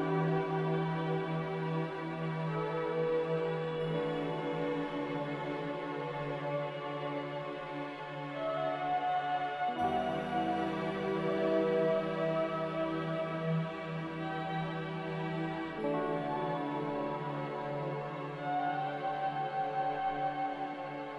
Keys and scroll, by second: 5.8 z, 9.4 typing, 10.1 Return, 12.5 typing, 16.5 b, 17.4 Delete.